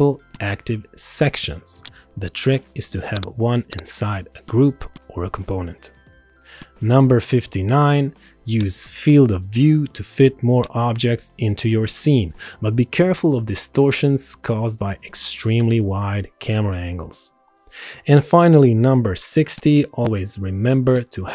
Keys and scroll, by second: 6.8 Return.